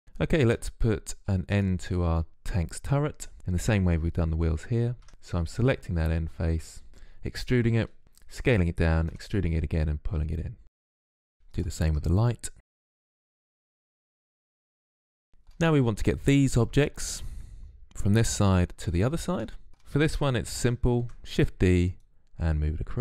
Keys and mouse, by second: 0.8-1.8 drag, 2.9 Tab, 3.9 click, 4.2 e, 4.5 s, 5.5-6.5 drag, 6.5 ctrl+z, 8.2 e, 9.6-11.2 drag, 11.2 Tab, 11.3 click, 11.4 Tab, 11.7 e, 11.8 click, 11.9 s, 12.3 e, 13.3 KP_Decimal, 14.0 e, 14.0 s, 14.1 click, 19.7 Tab, 20.9 shift+d, 21.9-23.0 drag.